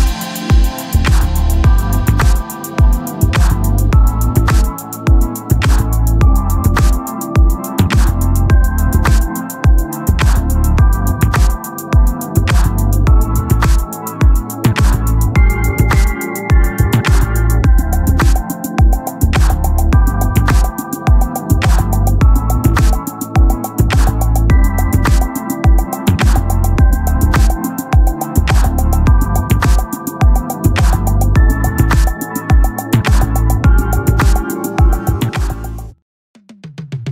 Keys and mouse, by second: 0.1 click, 2.1 click, 9.4 click, 11.5 click, 14.6 click, 18.1 click, 20.6 click, 24.0 click, 27.5 click, 30.1 click, 34.0 click.